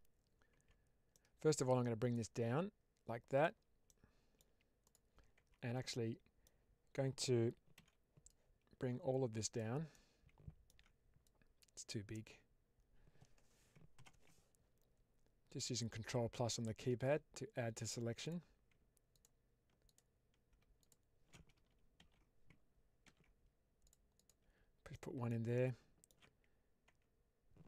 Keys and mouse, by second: 0.4 Tab, 1.0-1.4 middle drag, 2.1-3.3 drag, 3.7-4.2 middle drag, 5.3 Tab, 5.8 middle click, 7.6 alt+z, 8.2-9.4 drag, 9.8 middle click, 11.1 click, 13.9 ctrl+KP_Add, 15.5-17.8 drag, 18.1 click, 19.0 alt+click, 19.7 alt+click, 20.7 alt+shift+click, 21.9 ctrl+x, 22.9 ctrl+r, 24.0 click, 24.8 middle click, 25.4 alt+middle click, 27.5 Tab.